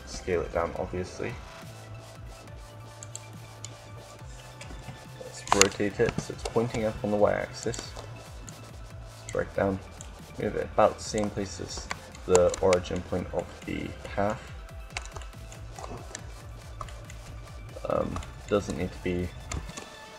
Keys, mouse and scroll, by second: 2.9-4.6 drag, 4.4 KP_7, 5.8 KP_7, 5.9 r, 8.2 r, 9.8-11.3 drag, 11.8-13.9 middle drag, 15.6 z, 19.5 g.